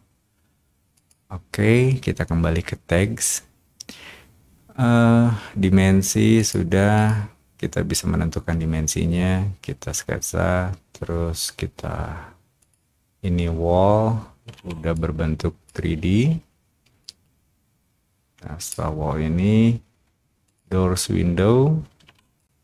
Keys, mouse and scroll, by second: 0.9 click, 6.3 click, 6.9 click, 12.5 click, 14.9 click, 16.9-18.6 drag, 20.4 click, 22.0 o, 22.3-22.6 drag.